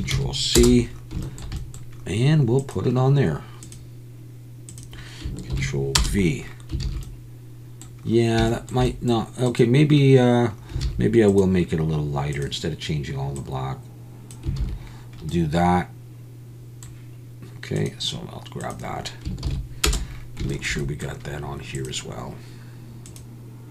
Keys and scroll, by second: 6.8 alt+a, 10.9 alt+a, 14.6 alt+a.